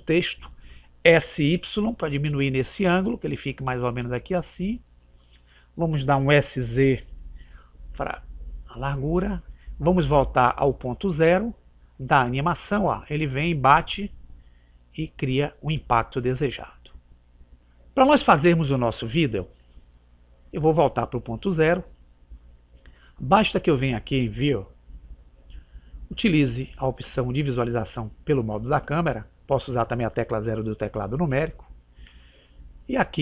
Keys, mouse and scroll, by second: 1.1 s, 7.1 s, 10.9 click, 19.4 click.